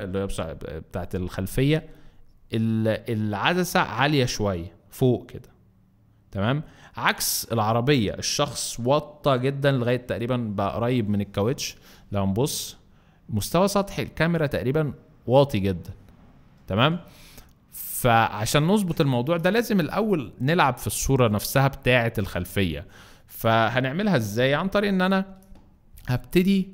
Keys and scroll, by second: 24.6 m.